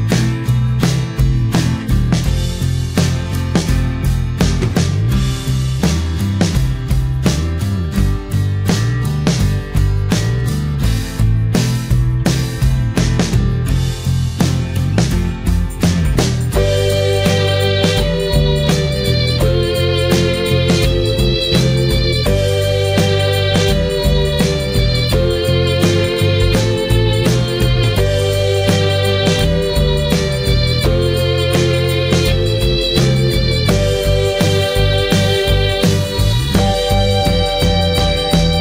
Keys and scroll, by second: 3.6 ctrl+0, 10.9 ctrl+j.